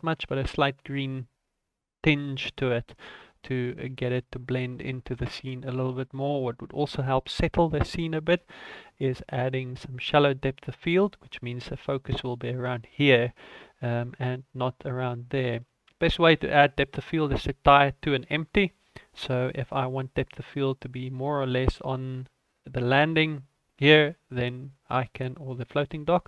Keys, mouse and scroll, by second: 7.1 ctrl+s.